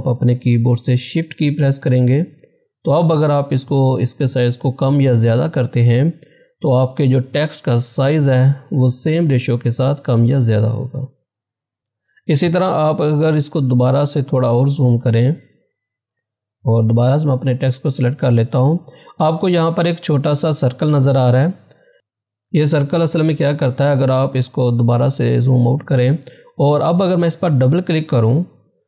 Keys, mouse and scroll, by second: 1.9 ctrl+z, 2.3-11.8 shift+drag, 13.8 shift+Num_Lock, 15.1 z, 15.6-17.4 drag, 21.9 ctrl+=, 22.5 ctrl+-, 28.1 ctrl+-, 28.1 click.